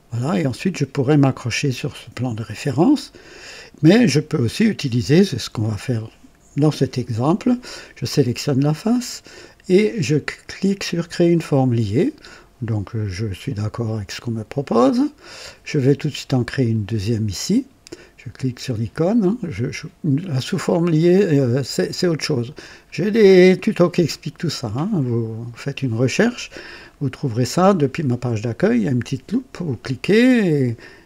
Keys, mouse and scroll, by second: 2.7 click, 8.4 click, 11.3 click, 14.4 click, 16.6 click.